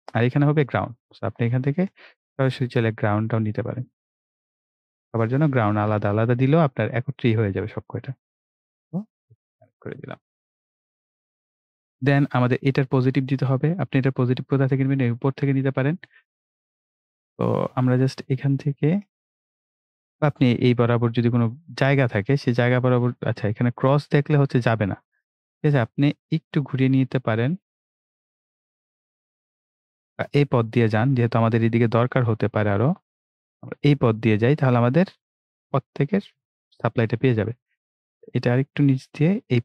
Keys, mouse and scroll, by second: 2.1 click, 2.6 right click, 3.3 click, 5.6 right click, 7.4 click, 10.4 right click, 11.6 click, 17.8 click, 30.4 click, 33.3 click.